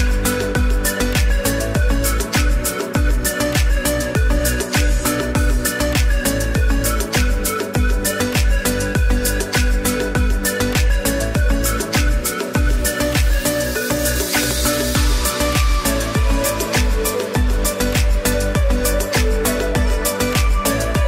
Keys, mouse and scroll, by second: 1.4 click, 6.7 click, 10.1 click, 16.6 click, 19.0 click.